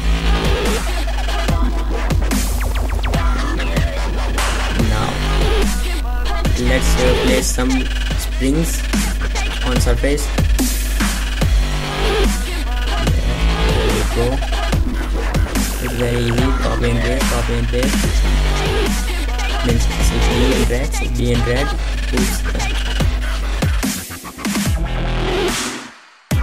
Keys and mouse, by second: 0.0-0.1 typing, 0.7 middle click, 1.1 middle click, 1.7-2.7 middle drag, 2.9 shift+d, 4.2 r, 5.1 KP_0, 5.2 KP_0, 5.8 KP_0, 6.9 shift+d, 7.8-9.0 drag, 9.0 shift+d, 9.3-10.0 drag, 10.2 ctrl+z, 11.4 r, 12.1 z, 12.2 z, 12.5 r, 13.7 r, 14.4 z, 14.6 z, 14.8 r, 15.9 drag, 19.6 shift+d, 20.0-20.7 drag, 21.8 shift+z, 23.2 shift+z, 24.9 ctrl+z.